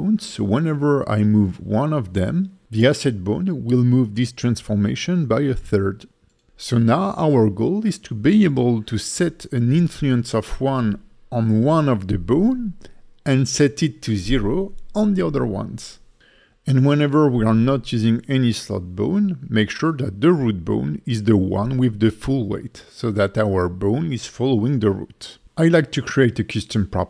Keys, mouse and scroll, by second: 0.4 g, 1.3 right click, 2.0 click, 2.5 g, 3.2 right click, 3.5 click, 3.5 middle click, 3.5 g, 4.3 right click, 5.1 click, 5.6 g, 6.3 right click, 6.6 click, 6.6 middle click, 6.6 g, 7.4 right click, 8.2 click, 8.7 g, 9.4 right click, 9.9 click, 10.3 g, 11.1 right click, 12.4 click, 13.4 click, 14.7 click, 15.9 click, 16.4 g, 17.8 right click, 19.3 click, 19.9 click, 21.0 click, 25.5 click, 26.0 Tab.